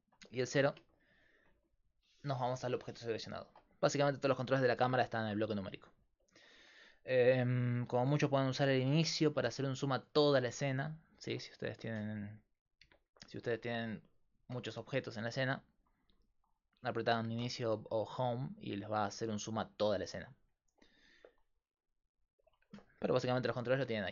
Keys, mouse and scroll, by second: 0.6 KP_Decimal, 9.3 Home, 9.4 Home, 11.3 Tab, 12.8 KP_Divide, 13.7-16.3 drag, 17.4 Home, 19.0 click, 22.3-24.1 drag.